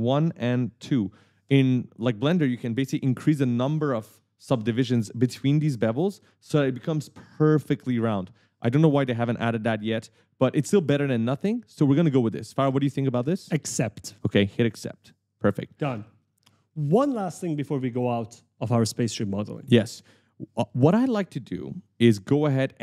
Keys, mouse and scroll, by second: 10.3 right click, 10.4 s, 10.9 w, 11.7 d, 12.5 scroll up 1, 15.5 click, 16.1 right click, 18.3-18.7 scroll up 1.